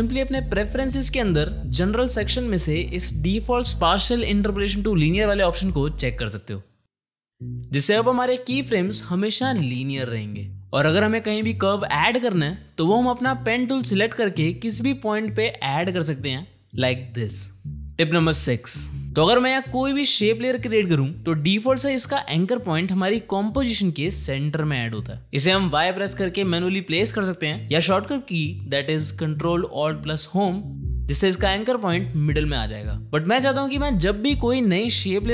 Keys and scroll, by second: 8.0 ctrl+alt+p, 10.4 ctrl+z, 25.3 y, 30.4 ctrl+alt+Home.